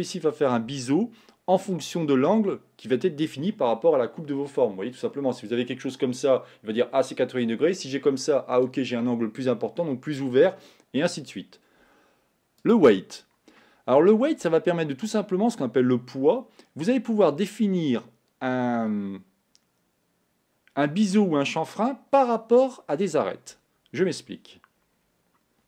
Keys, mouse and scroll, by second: 24.9-25.6 scroll down 4.